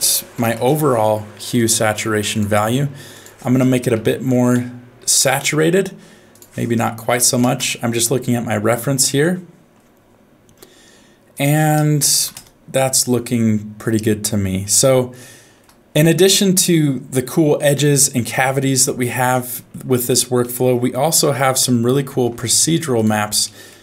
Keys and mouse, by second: 3.2-5.2 drag, 6.4-7.6 drag, 9.2 middle click, 11.3-12.3 drag, 15.2 shift+middle click, 18.6 middle click, 19.5 middle click, 20.0 click, 20.4 middle click, 21.1 shift+d, 22.1 shift+d, 23.4 middle click.